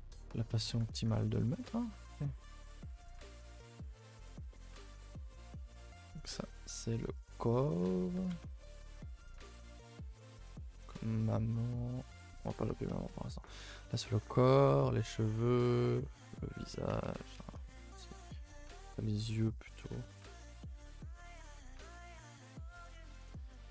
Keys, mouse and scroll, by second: 0.0 Tab, 0.2 middle drag, 0.4 a, 0.6 a, 1.0-1.9 middle drag, 1.9 alt+h, 2.4 a, 2.6 a, 2.7-3.2 middle drag, 3.2 click, 4.0 click, 4.3-4.7 shift+middle drag, 4.7 a, 4.8 a, 5.0 shift+middle click, 5.6 click, 7.3-10.8 drag, 10.8 a, 10.9 ctrl+s, 11.2 click, 13.5 click, 14.7 click, 16.0 click, 17.4 a, 17.6 a, 18.3 click, 20.3-21.3 drag, 21.3 shift+middle click, 21.5-21.9 scroll up 1, 21.9-23.7 shift+middle drag.